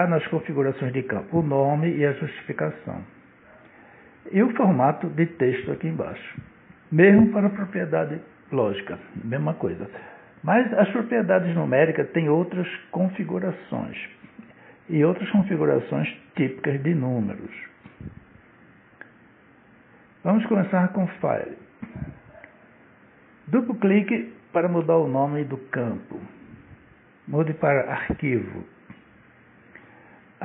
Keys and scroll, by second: 25.9-28.1 typing.